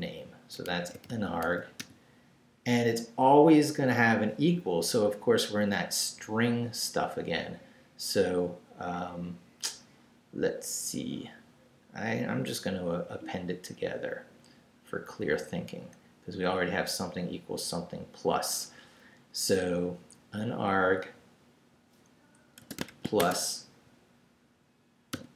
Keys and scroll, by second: 0.5-2.3 typing, 5.0 Left, 12.2 Right, 22.6-25.1 typing.